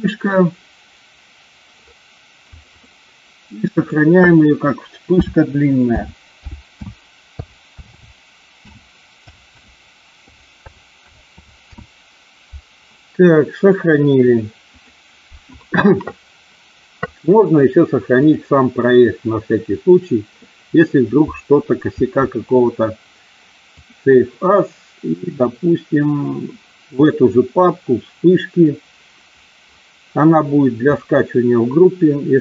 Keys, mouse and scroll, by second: 18.1-24.0 drag.